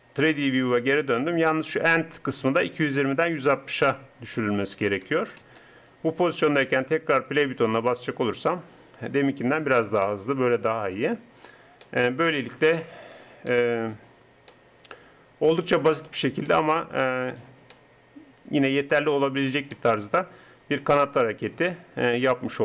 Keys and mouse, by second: 3.8-7.3 drag, 10.1 click, 19.7 middle click.